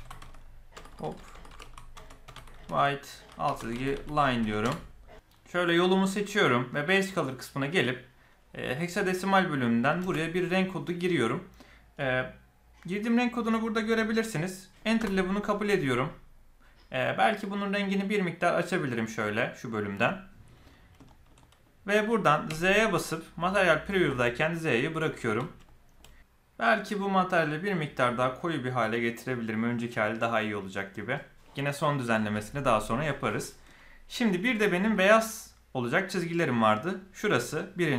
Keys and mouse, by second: 0.8 BackSpace, 0.9 BackSpace, 1.4 BackSpace, 5.6 click, 21.0 shift+middle click, 21.3 middle click, 22.4 z, 24.8 middle click, 25.6 shift+middle click, 27.4 click, 34.7 click, 36.3 click.